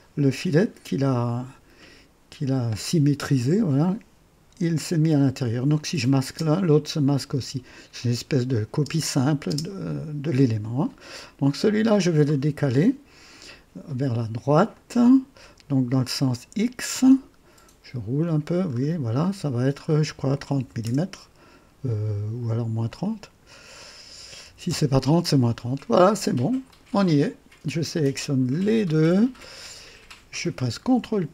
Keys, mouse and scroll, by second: 5.7 click, 6.2 space, 7.3 space, 8.7 space, 9.4 space, 11.3 click, 14.7 click, 15.9 click, 17.8-18.9 scroll down 4, 19.6 scroll down 2, 20.6 KP_3, 20.8 KP_0, 22.8 click, 24.0 KP_Subtract, 24.4 KP_3, 24.6 KP_0, 26.6 click, 28.5 ctrl+click, 30.5 typing.